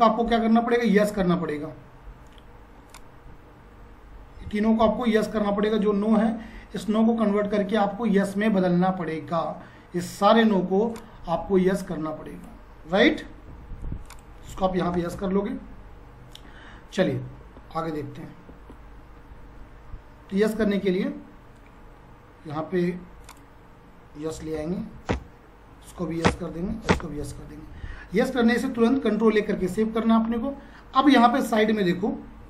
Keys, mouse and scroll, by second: 1.0 F5, 1.5 F5, 2.8 shift+click, 7.2 F5, 10.9 shift+click, 13.5 F5, 14.0 click, 14.6-15.7 typing, 20.8 F4, 24.1-26.0 typing, 26.3 Return, 28.8 ctrl+a, 32.4 F4.